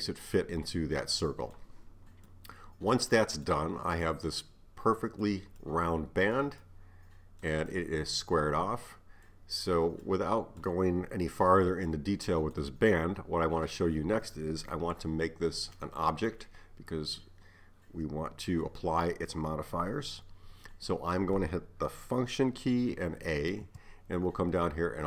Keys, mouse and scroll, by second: 15.8-18.8 middle drag, 23.5 a.